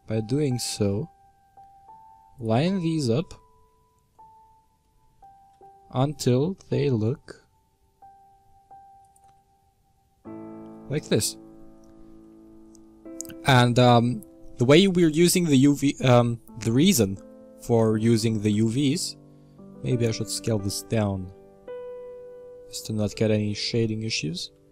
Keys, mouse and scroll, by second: 3.1-4.1 scroll up 9, 4.1-5.5 shift+middle drag, 5.5 Tab, 6.1 Tab, 6.5 s, 9.2 Tab, 10.6-12.2 scroll down 15, 12.2-14.8 middle drag, 14.8-15.3 scroll down 2, 15.3-17.4 middle drag, 17.4 Tab, 18.4 s, 23.0-24.4 scroll up 11, 24.4 s.